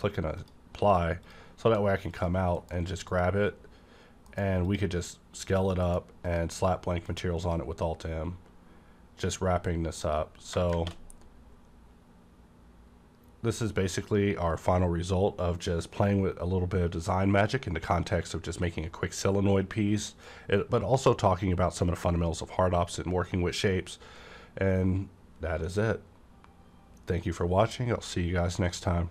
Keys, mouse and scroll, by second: 0.4 click, 0.8 s, 1.2 click, 1.6 s, 2.1 click, 2.6 m, 3.1 click, 4.3 alt+m, 4.7 click, 5.8 m, 6.3 click, 7.1 alt+m, 7.4 click, 8.6-10.0 scroll up 1, 10.0 click, 11.2 -.